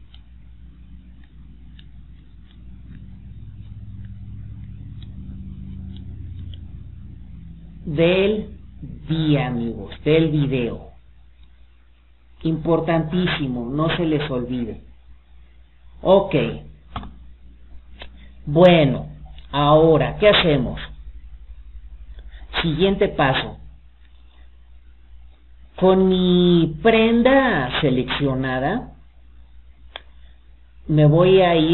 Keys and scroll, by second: 8.9 Escape.